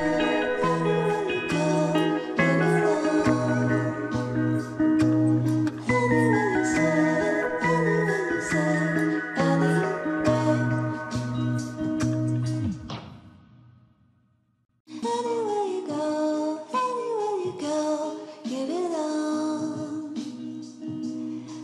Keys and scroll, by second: 7.0 ctrl+c.